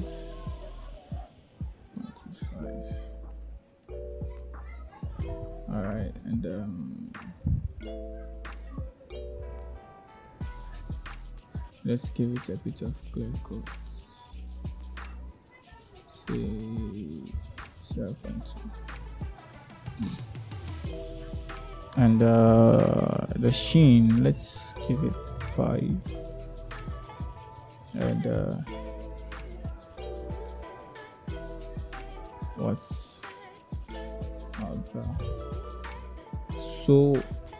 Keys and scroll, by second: 0.7 0, 0.9 ., 1.1 2, 2.1 Return, 17.1 0, 17.2 ., 17.5 2, 17.7 Return, 23.8 5, 24.1 Return.